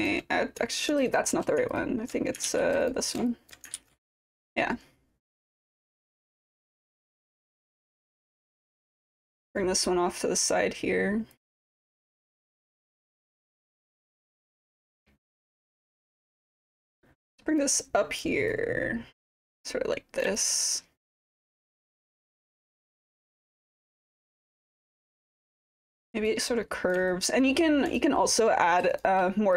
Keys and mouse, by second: 1.7 ctrl+click, 2.9 shift+click, 3.3 alt+click, 3.8 ctrl+d, 5.8 alt+click, 6.3 w, 7.1 click, 8.1 alt+click, 8.2-9.0 typing, 9.6 click, 11.6 alt+click, 11.6 typing, 12.3 click, 14.0 click, 14.6-15.6 alt+drag, 16.1 click, 16.5-17.6 drag, 18.1 click, 18.6-20.2 drag, 20.4-22.1 alt+drag, 23.0-24.3 drag, 24.5 alt+click, 25.5 alt+click, 26.3 click, 27.1 alt+click, 28.0 alt+click, 28.9 shift+click.